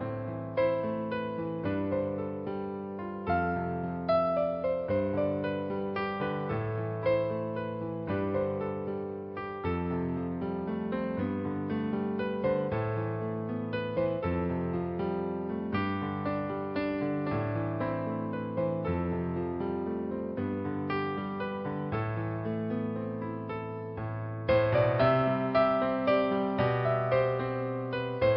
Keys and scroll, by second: 0.0-2.0 typing, 4.2 typing, 6.4 space, 7.5 space, 9.8 [, 11.0-13.6 typing, 15.0 space, 16.0 [, 17.8-19.7 typing, 22.7 ctrl+z, 24.5 ctrl+alt+g, 27.3 space.